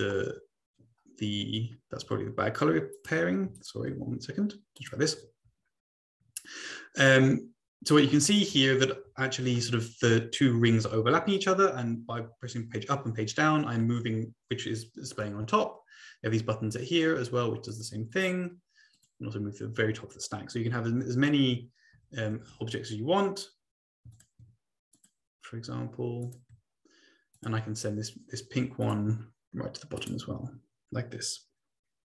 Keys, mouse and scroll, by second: 0.0 Page_Up, 1.4 Page_Down, 3.0 click, 3.6 shift+click, 4.8 click, 8.1 Page_Down, 8.5 Page_Up, 9.1 Page_Down, 10.7 Page_Up, 11.0 Page_Down, 12.4 Page_Up, 13.0 Page_Down, 17.7 click, 18.1 click, 18.9 click, 21.2 ctrl+c, 21.5 ctrl+v, 22.5 ctrl+v, 24.1 shift+click, 25.0 click, 26.2 click, 27.4 click, 28.8 click, 30.0 click.